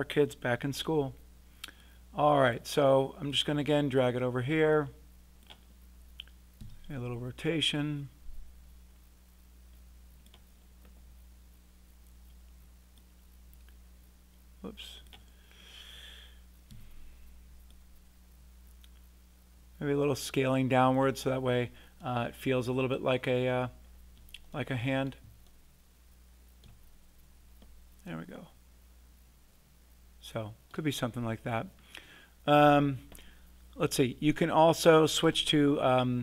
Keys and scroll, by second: 6.6 e, 16.7 r.